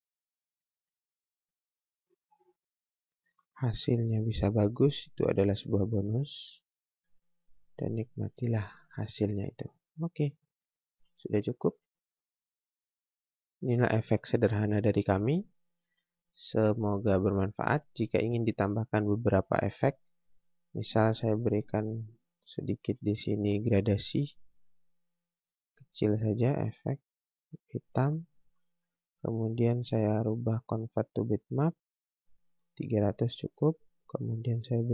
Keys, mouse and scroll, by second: 0.1 scroll down 1, 0.3 scroll up 1, 0.7 space, 1.3 click, 5.7 space, 6.5 click, 7.4 right click, 7.9 click, 8.3 scroll down 1, 9.5 scroll up 1, 9.9 scroll down 1, 10.2 click, 10.9 Delete, 12.1 F4, 13.6 click, 16.1 click, 17.9 scroll down 1, 18.2 scroll up 1, 19.1 scroll down 1, 20.6 click, 24.5 space, 24.7 click, 27.9 right click, 28.9-29.7 scroll up 1, 29.7 click, 33.3 click.